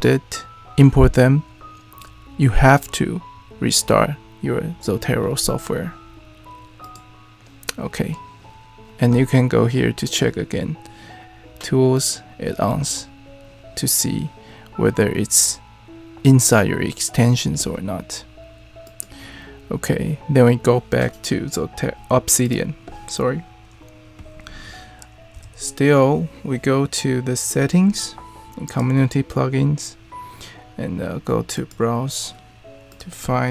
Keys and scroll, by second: 25.3 super+,, 33.4-33.5 typing.